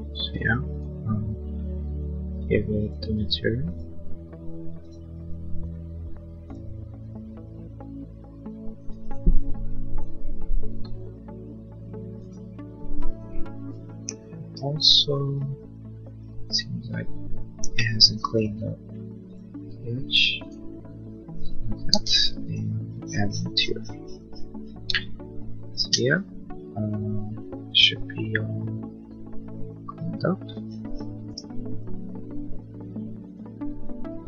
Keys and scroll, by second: 0.0 b, 16.9 l, 21.6 b, 24.9 Escape, 25.6 Escape.